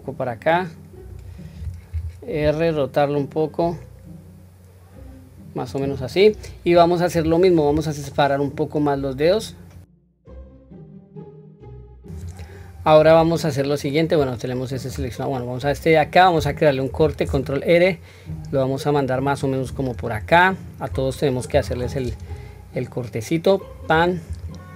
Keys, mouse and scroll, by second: 8.3-9.9 middle drag, 10.2 alt+shift+click, 10.3-11.6 typing, 10.7 alt+click, 11.0 middle click, 11.2 alt+shift+click, 11.2 middle click, 11.4 middle click, 11.9 middle click, 13.2-14.9 middle drag, 16.9 ctrl+r, 21.5 ctrl+r.